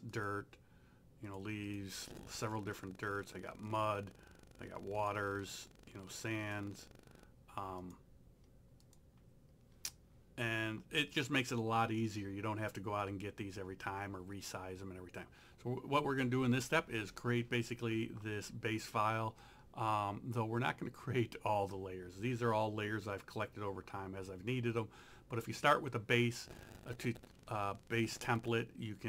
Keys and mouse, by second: 3.7 click.